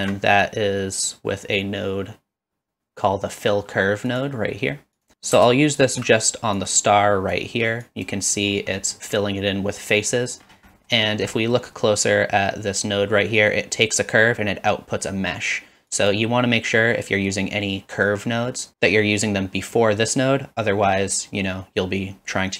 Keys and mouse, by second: 0.0 shift+a, 5.8 alt+shift+click, 6.6-7.4 drag, 8.0 click, 8.8 middle drag, 10.0 middle click, 10.7 middle click, 11.3 middle click, 16.0 click.